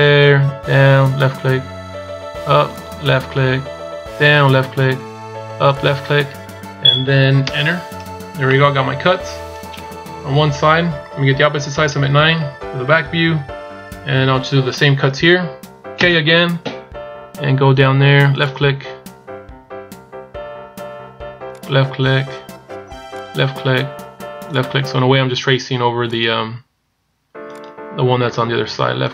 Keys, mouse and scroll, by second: 8.3 middle click, 12.1 KP_9.